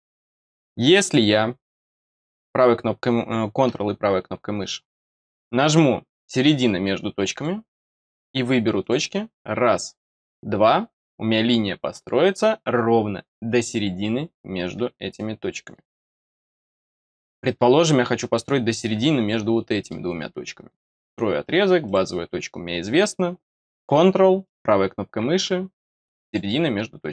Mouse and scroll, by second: 1.0 click, 1.5 middle click, 2.1 right click, 4.5 right click, 7.2 click, 8.8 click, 10.1 click, 16.1-16.5 scroll down 1, 16.5 middle click, 17.3 middle click, 19.7 middle click, 20.9 click, 21.8 click, 24.4 right click, 26.2 click.